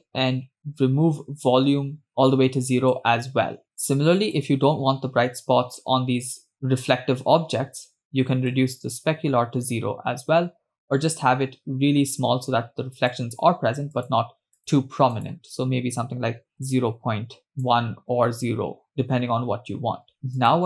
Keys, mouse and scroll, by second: 1.2-3.5 drag, 3.7 click, 8.5-13.2 drag, 14.0-15.2 drag, 15.6-17.5 drag, 18.0 click, 20.3 space.